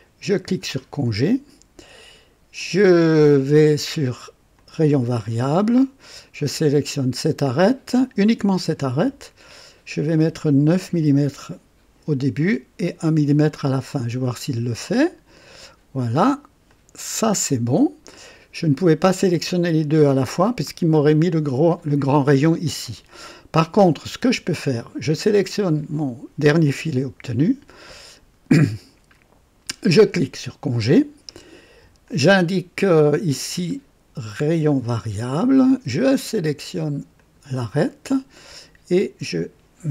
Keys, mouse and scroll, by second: 0.4 click, 2.5 click, 3.5 click, 4.5 click, 5.2 click, 6.8 click, 9.5 click, 10.9 KP_9, 14.8 click, 16.6-18.5 drag, 24.0 click, 25.3 click, 29.7 click, 32.0 click, 33.6 click, 34.6 click, 37.1 click, 38.9 click.